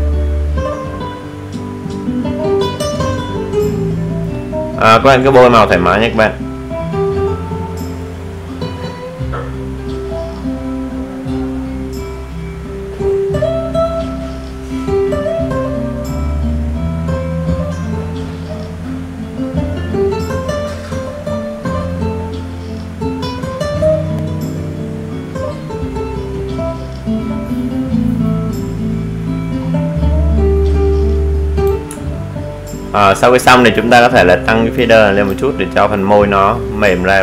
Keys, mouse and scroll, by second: 32.0 alt+scroll down 1, 32.8-34.3 alt+scroll down 1, 34.3-37.2 alt+drag.